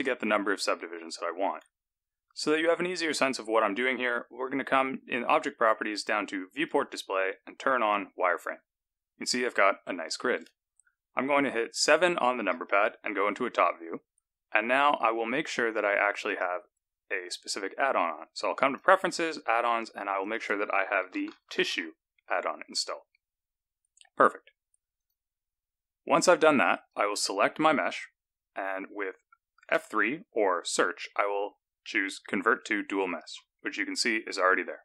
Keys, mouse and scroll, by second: 1.4 Tab, 6.5 click, 7.8 click, 12.4 KP_7, 16.3 click, 26.7 click, 29.6 F3.